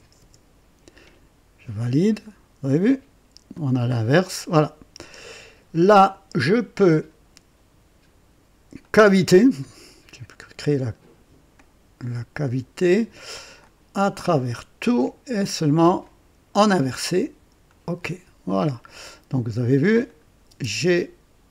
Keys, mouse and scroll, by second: 0.1 Return, 1.8 click, 3.5 click, 5.1-6.3 drag, 8.8 click, 11.5-12.8 drag, 13.6 click, 14.3 click, 16.0 click, 17.6 click, 18.6 click, 20.0 click, 20.2 typing.